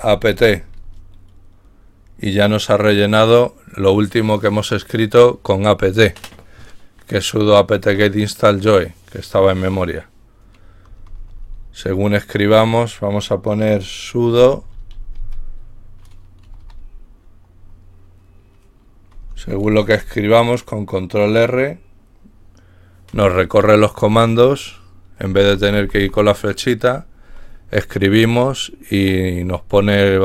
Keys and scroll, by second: 0.0-0.5 typing, 14.1-15.7 typing, 16.5 Insert, 16.7 Insert, 19.3 typing, 25.2 Down, 25.6-26.3 typing.